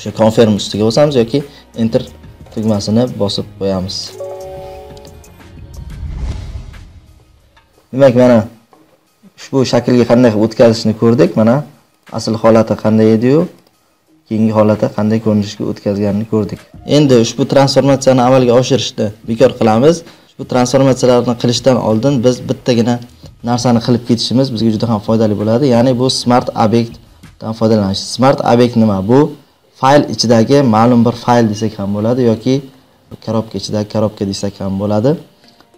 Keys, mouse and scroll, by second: 2.0 Return, 4.0 click, 5.6 Return, 6.7 click, 6.8 Return, 12.0 click, 13.6 click, 14.4 scroll, 16.4 click, 19.6 ctrl+z, 20.4 ctrl+z, 20.9 ctrl+z.